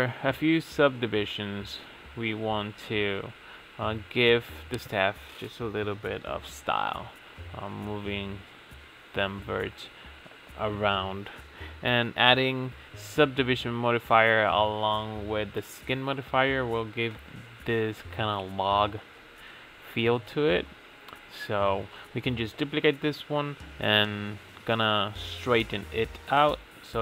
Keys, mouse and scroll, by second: 4.8 Tab, 5.6 g, 7.1 click, 7.9 g, 9.7 Tab, 10.0 click, 11.6-11.9 drag, 12.4 click, 13.1 ctrl+a, 13.5-15.5 drag, 15.5 Tab, 16.0 a, 16.8 ctrl+a, 18.2 middle click, 18.5 shift+d, 19.7-22.8 drag, 22.9 Tab, 23.9 s, 26.4 click, 26.6 shift+d.